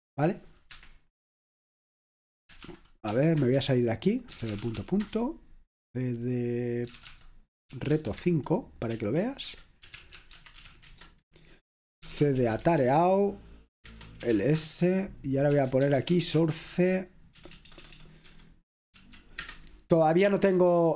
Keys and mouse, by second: 0.7 Escape, 2.5-5.7 typing, 6.7-19.5 typing.